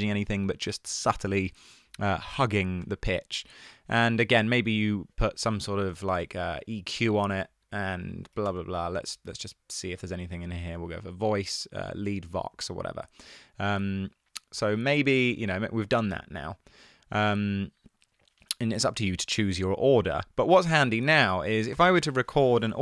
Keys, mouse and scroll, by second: 6.1-8.5 typing, 6.7 Down, 15.7 click, 21.1 click.